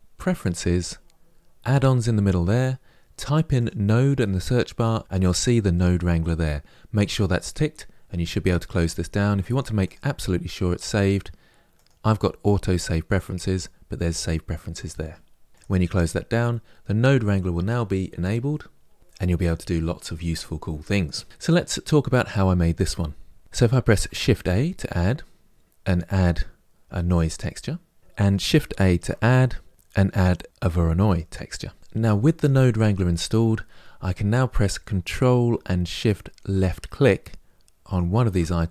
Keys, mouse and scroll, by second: 0.5-9.2 drag, 37.7 ctrl+shift+click.